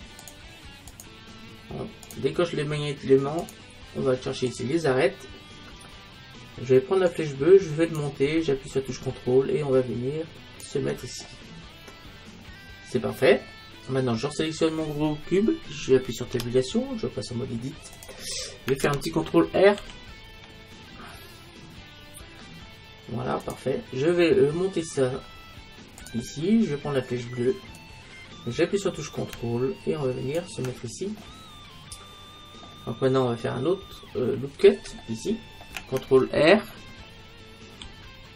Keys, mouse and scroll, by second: 2.2-5.2 drag, 7.2-9.0 drag, 9.1-11.3 drag, 11.3 middle click, 11.7 middle click, 12.1-13.1 middle drag, 14.3-16.2 right drag, 16.4 Tab, 19.8 ctrl+r, 27.8-29.7 drag, 31.2-36.9 middle drag, 37.9 ctrl+r.